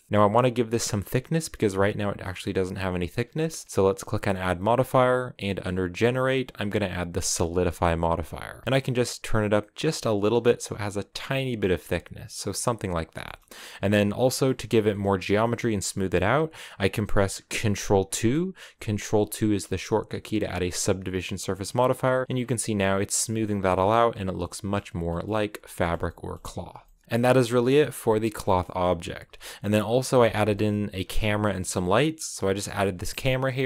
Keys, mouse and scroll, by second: 0.0 click, 0.1-1.8 scroll up 3, 1.8 scroll down 1, 2.0-7.1 middle drag, 7.6-8.6 scroll up 2, 8.6-9.9 shift+drag, 11.5-12.2 scroll down 3, 12.2-13.4 middle drag, 13.4-13.8 scroll up 2, 13.8 scroll down 2, 14.1-15.5 middle drag, 15.5-17.2 scroll up 1, 17.9 ctrl+2, 20.3 scroll down 6, 20.4 middle click, 21.4-21.8 scroll up 2, 22.2-23.3 middle drag, 23.3 scroll down 1, 23.5 middle click, 24.5-24.9 scroll up 2, 24.9-27.0 middle drag, 27.0 scroll down 2, 27.1-29.8 middle drag, 29.8 alt+h, 30.1 scroll down 2, 30.2 middle click, 30.7 scroll down 1, 30.9 a, 32.1 right click, 32.3-33.3 middle drag, 33.3 KP_0.